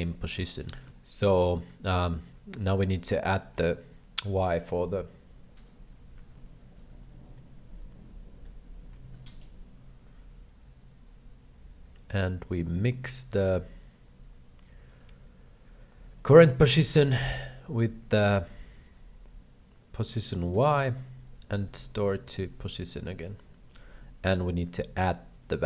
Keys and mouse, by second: 0.5 shift+middle click, 0.7 x, 2.2 shift+middle click, 3.5 shift+middle click, 7.4-8.5 shift+middle drag, 9.1 shift+a, 13.9-16.2 drag, 17.5-20.4 drag, 21.6 ctrl+c, 22.3 ctrl+v, 23.3 click, 24.4-25.4 ctrl+drag.